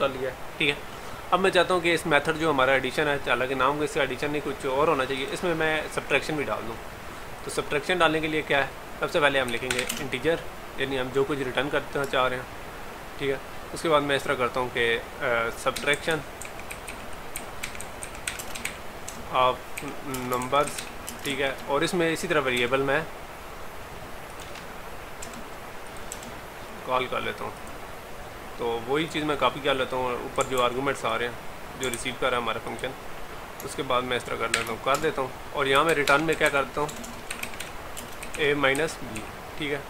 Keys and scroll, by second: 30.6 ctrl+c, 32.0 ctrl+v.